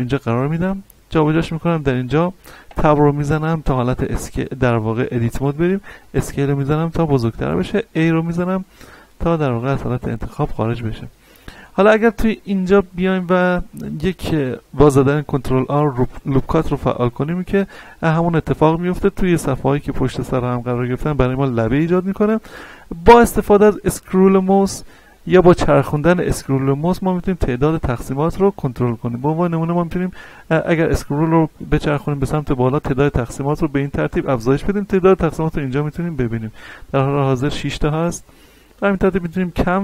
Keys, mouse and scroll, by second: 2.7 Tab, 5.6 s, 7.1 click, 7.9 a, 8.4 scroll down 1, 9.0 middle click, 9.6 shift+middle click, 10.3-10.7 scroll up 1, 11.1 middle click, 12.1 middle click, 16.0 ctrl+r, 25.8-27.0 scroll up 1, 27.0-28.1 scroll down 1, 28.1-28.7 scroll up 1, 28.7-30.5 scroll down 1, 30.6-31.1 scroll up 1, 31.7 scroll down 1, 32.1-32.4 scroll up 1, 38.4-38.8 scroll up 1, 38.8 scroll down 1, 39.5-39.8 scroll up 1.